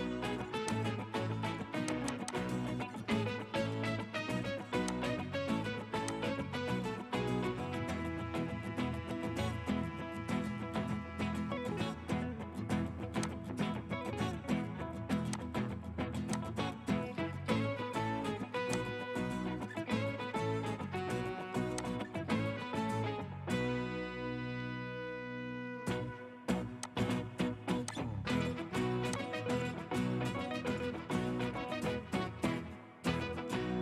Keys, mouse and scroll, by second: 2.1 double click, 3.5 typing, 6.6-7.1 scroll up 1, 7.1 typing, 22.2 scroll up 1, 23.8-24.2 scroll down 1.